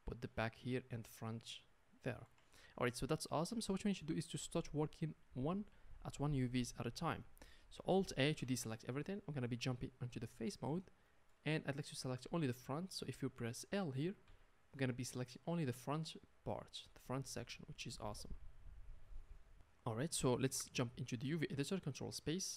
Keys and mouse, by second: 8.4 alt+a, 10.5-22.5 drag, 14.2 l.